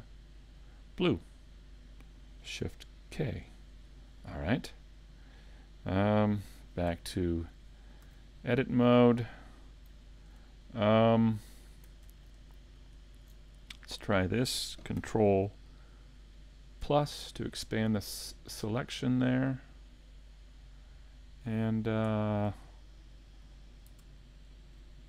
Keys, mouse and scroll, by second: 0.8 click, 3.2 shift+k, 4.6 middle click, 6.9 Tab, 7.5 middle click, 8.1 a, 8.5 middle click, 12.8 alt+shift+right click, 13.4 middle click, 16.8 ctrl+KP_Add, 18.6 middle click, 22.2 shift+middle click.